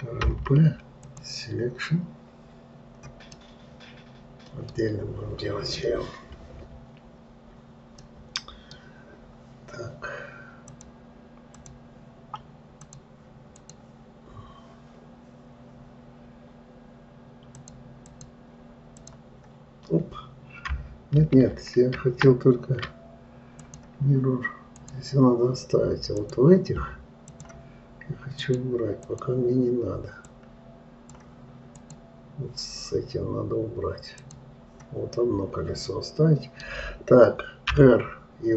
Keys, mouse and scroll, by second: 0.7 p, 3.8-6.9 middle drag, 8.4-11.1 middle drag, 11.1-13.4 drag, 14.0 click, 18.0 click, 19.4-21.6 drag, 21.6 ctrl+z, 24.0-26.7 drag, 27.7-28.9 drag, 29.5 click, 30.7-32.3 drag, 34.6 click, 35.6-38.2 middle drag, 38.2 r.